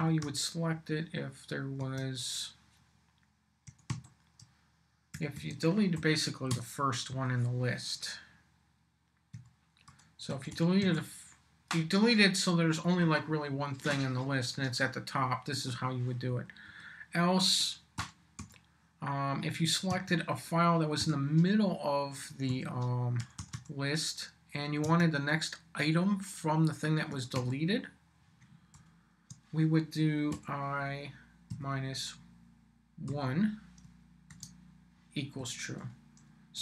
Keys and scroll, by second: 0.0-0.7 typing, 1.8 Tab, 3.4-6.5 typing, 5.9 shift+Left, 7.1 Right, 9.3-11.3 typing, 16.3 Down, 18.0 |, 18.4 b, 19.9 Tab, 21.0 •, 22.5-24.0 typing, 24.8 Tab, 26.9-28.7 typing, 30.4 i, 31.5 -, 33.1-36.6 typing.